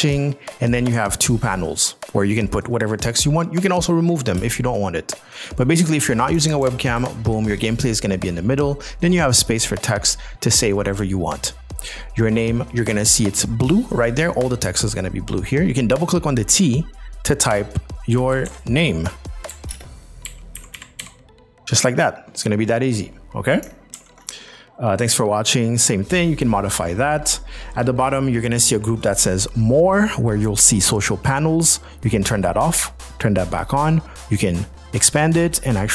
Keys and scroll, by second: 4.4 space, 7.0 ctrl+6, 18.4 shift+m, 18.5 shift+r, 19.7 shift+space, 20.3 p, 20.6 o, 21.0 p, 24.0 ctrl+z, 25.3 z.